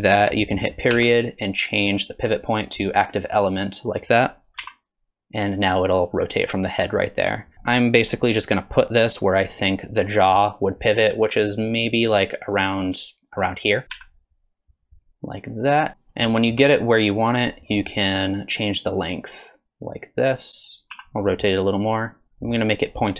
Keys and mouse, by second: 4.6 r, 13.9 g, 16.3 shift+click, 18.1-20.9 shift+drag, 20.9 r.